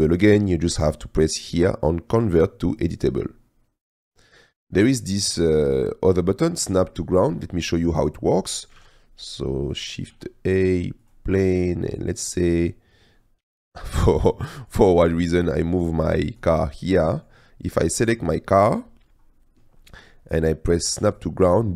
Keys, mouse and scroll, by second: 2.8-4.2 drag, 4.6 middle click, 8.5 click, 8.8 shift+a, 10.2 s, 12.7 click, 13.4 g, 13.6 z, 15.1 drag, 16.4 click, 17.2 click, 17.8 click, 19.7-20.1 drag, 21.0 click.